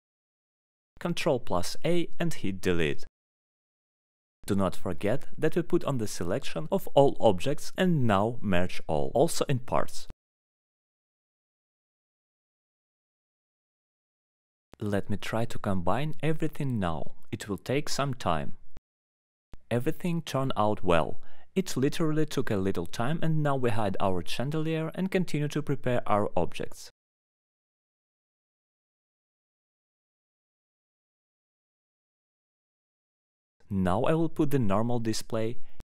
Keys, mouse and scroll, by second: 0.2 alt+middle click, 1.3 click, 1.7 middle click, 3.1 alt+middle click, 3.7 alt+middle click, 4.3 scroll, 4.8-5.3 alt+scroll, 5.5 click, 6.1-6.4 alt+scroll, 6.8 click, 7.5 middle click, 8.4 click, 9.1 click, 10.1 click, 10.9 middle click, 15.2 alt+middle click, 20.3 middle click, 24.6 middle click, 25.7 click, 26.6 middle click, 29.2 middle click, 30.3-30.8 scroll up 3, 32.3 scroll, 32.8 click, 33.4 alt+middle click, 33.6-34.3 scroll, 35.2 click.